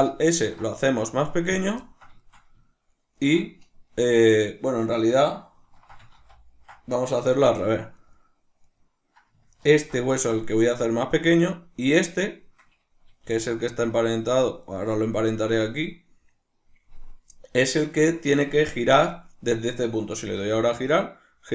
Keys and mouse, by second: 0.3 ctrl+alt+s, 1.6 click, 1.8-8.0 ctrl+middle drag, 6.2 ctrl+z, 8.0 right click, 8.2 right click, 8.6 right click, 11.2 click, 11.5 right click, 13.3 g, 14.7 right click, 18.6 Tab.